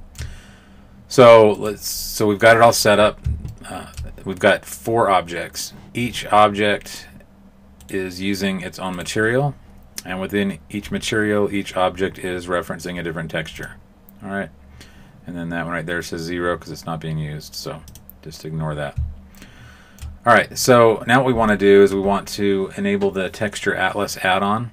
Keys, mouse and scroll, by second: 1.5 right click, 2.0 middle click, 3.4 middle click, 6.9 right click, 7.7 right click, 9.5 right click, 13.5 click, 19.3 shift+middle click.